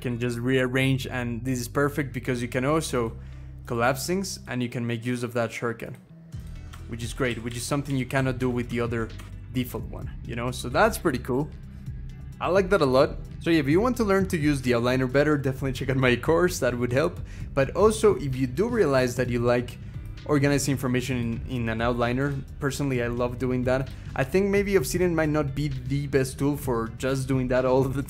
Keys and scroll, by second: 0.0 Up, 0.4 ctrl+shift+Down, 0.7 ctrl+shift+Down, 6.8 ctrl+shift+Up, 7.1 ctrl+shift+Up, 7.3 ctrl+shift+Up, 7.7 ctrl+shift+Up, 7.9 ctrl+shift+Down, 8.2 ctrl+shift+Down, 8.5 ctrl+shift+Down, 9.1 ctrl+shift+Up, 9.3 ctrl+shift+Up, 9.8 Down, 9.8 ctrl+shift+Up, 10.5 ctrl+shift+Up, 10.8 ctrl+shift+Up, 11.1 ctrl+shift+Up, 11.7 ctrl+shift+Down, 11.9 ctrl+shift+Down, 12.2 ctrl+shift+Down.